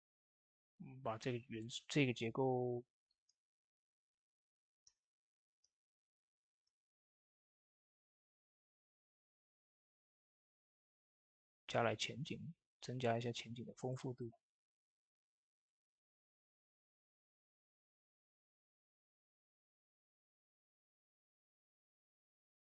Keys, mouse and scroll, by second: 0.0 shift+middle click, 1.0-2.5 drag, 2.5 ctrl+space, 3.1 ctrl+space, 4.7 ctrl+space, 5.5 ctrl+space, 6.5 shift+space, 7.2-14.0 drag, 14.0 middle click, 15.1 shift+space, 15.5-19.4 drag, 19.4 middle click, 20.2-22.7 drag.